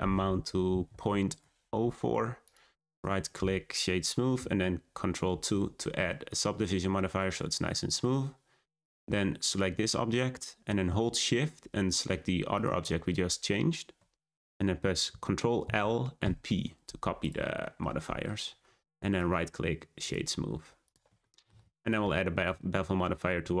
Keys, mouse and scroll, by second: 2.4-5.3 right drag, 5.3 ctrl+2, 6.0-9.1 middle drag, 9.4 click, 12.5 shift+click, 15.6 ctrl+l, 17.2 click, 17.6-18.4 shift+middle drag, 18.4 scroll up 3, 18.8 click, 19.1 right click, 20.4-20.8 scroll down 4, 20.8 click, 21.2-21.8 shift+middle drag, 21.8 click, 22.5-23.6 middle drag.